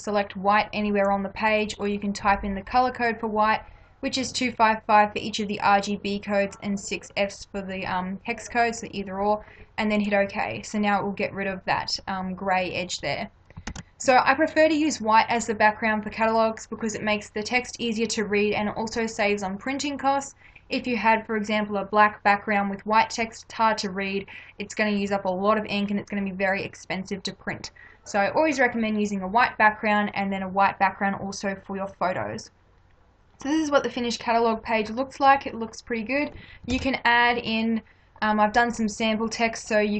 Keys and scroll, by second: 13.7 ctrl+-, 36.7 ctrl+=.